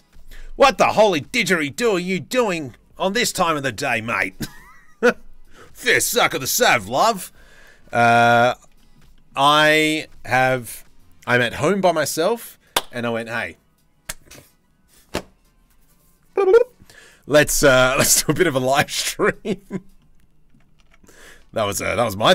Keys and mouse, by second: 7.8 drag, 8.0-8.7 shift+middle drag, 8.7 click, 8.9-17.5 middle drag, 17.5 click, 17.6 middle click, 18.1 click, 18.3-19.6 middle drag, 19.6-20.1 drag, 20.4 Tab, 20.9 Tab, 21.0 Tab, 22.0 click.